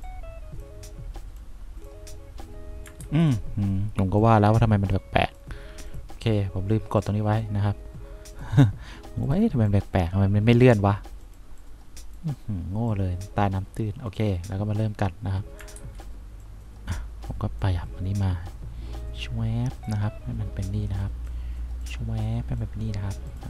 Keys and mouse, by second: 0.3 click, 3.2 ctrl+z, 10.2 click, 11.9 click, 15.9 ctrl+z.